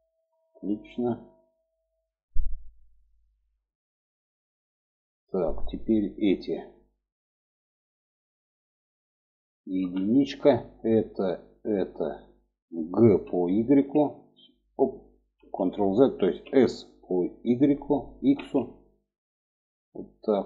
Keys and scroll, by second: 9.3 1, 12.6 g, 15.1 ctrl+z, 15.9 s.